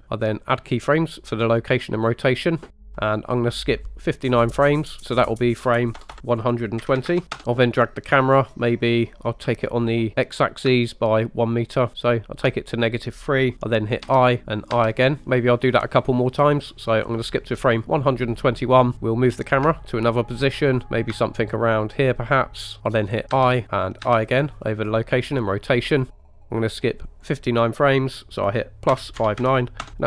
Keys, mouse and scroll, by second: 0.5 click, 3.0 middle click, 3.1 click, 3.6-7.4 drag, 6.1 BackSpace, 10.4-12.4 ctrl+drag, 14.1 i, 14.8 i, 15.2 click, 15.2 space, 17.7 click, 18.9 Left, 18.9 click, 19.7 ctrl+click, 20.0 ctrl+middle click, 21.1 click, 22.0 ctrl+click, 23.4 i, 24.1 i, 26.3 middle click, 26.7-30.0 drag.